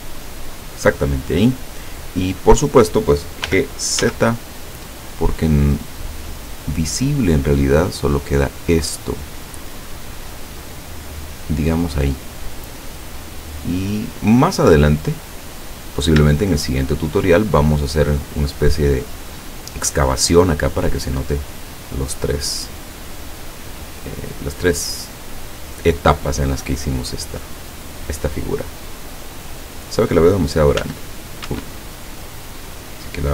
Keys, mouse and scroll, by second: 0.6 click, 1.2 scroll down 2, 3.5 g, 4.0 z, 12.0 click, 13.6-14.7 middle drag, 14.9 right click, 15.6-16.2 scroll up 2, 16.2 shift+scroll up 1, 16.4 shift+middle click, 22.6-24.5 middle drag, 24.6 scroll down 2, 26.2 scroll down 2, 26.6 click, 28.5-29.2 scroll up 2, 30.8 s, 31.5 Escape, 32.3 right click.